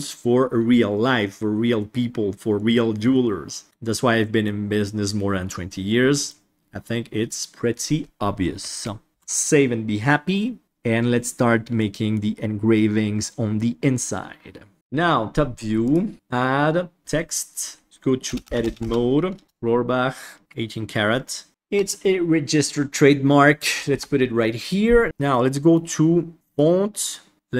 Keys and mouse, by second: 4.1 middle drag, 6.0 middle drag, 8.8-9.1 middle drag, 9.1 ctrl+s, 11.7-12.1 middle drag, 14.7 KP_7, 16.1-17.0 drag, 17.8 Tab, 18.2-20.4 typing, 21.5 ctrl+v, 21.5 shift+middle click, 21.5 space, 23.8 Tab, 25.2 middle click, 26.4 click.